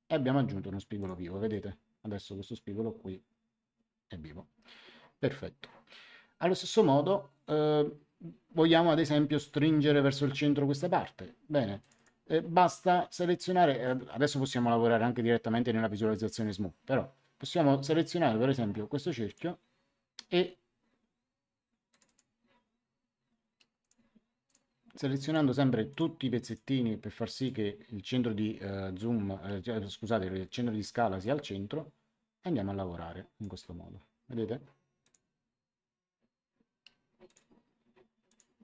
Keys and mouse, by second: 0.9 click, 11.8 click, 19.2 click, 21.8 click, 23.8 click, 31.2 click, 35.0 click, 37.2 click.